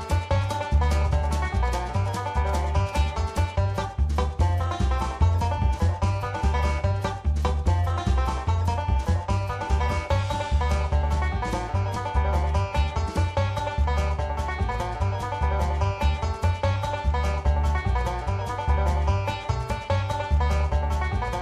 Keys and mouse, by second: 1.6 shift+middle click, 2.6-4.1 drag, 4.4 shift+middle click, 5.6 click, 8.0 shift+middle click, 8.9 click, 11.1 shift+middle click, 12.2-13.9 drag, 14.5 shift+middle click, 17.1 shift+middle click, 19.0-20.1 drag, 21.2-21.4 drag.